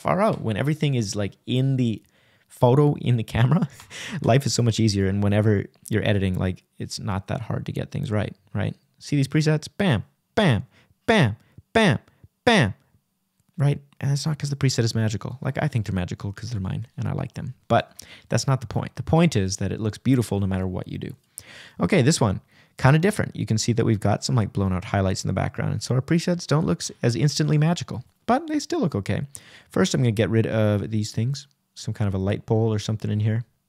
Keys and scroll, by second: 8.2 shift+-, 8.9 shift+=, 10.3 shift+-, 11.2 shift+Right.